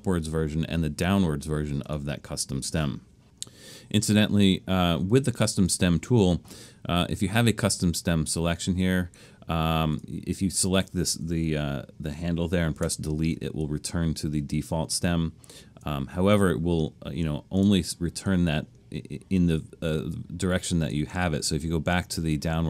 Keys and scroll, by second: 12.8 BackSpace.